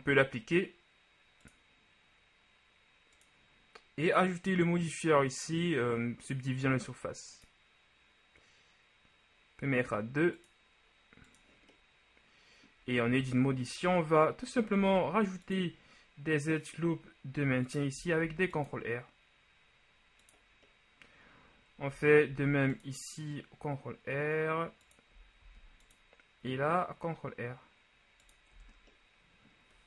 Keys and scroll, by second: 13.2 Tab, 14.9 ctrl+r, 18.3 ctrl+r, 22.4 ctrl+r, 25.5 ctrl+r, 28.6 Tab.